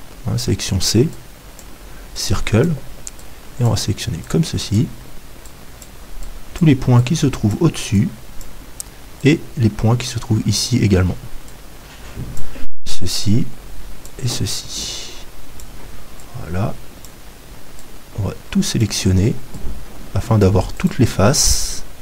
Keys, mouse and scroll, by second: 20.9-22.0 right drag, 21.5-22.0 drag.